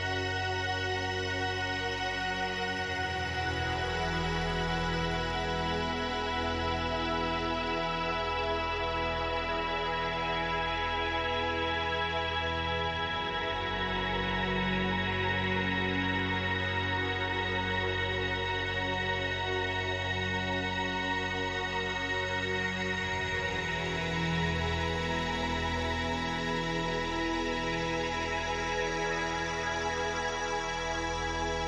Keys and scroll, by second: 0.4 space, 4.1 space, 15.2 space, 16.7 space, 22.7 ctrl+z, 29.4 space, 30.4 space.